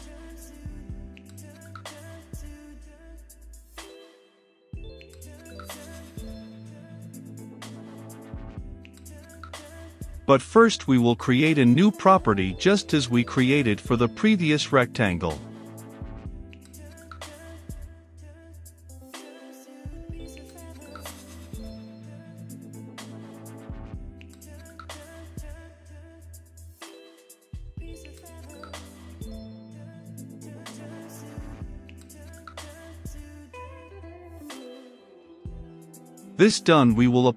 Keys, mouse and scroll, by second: 3.1-6.1 drag, 7.7-9.4 drag, 9.4 Return, 10.0-11.2 typing, 10.6 Return, 11.9 click, 12.3-16.0 typing, 16.7 click, 17.0 Return, 17.3 shift+`, 17.9 ctrl+v, 19.4-22.0 drag, 22.0-24.0 middle drag, 24.0-25.8 drag, 26.1 ctrl+space, 26.8 Return, 27.8-32.2 drag, 32.4 ctrl+s, 35.1-36.2 middle drag, 36.2-37.3 drag.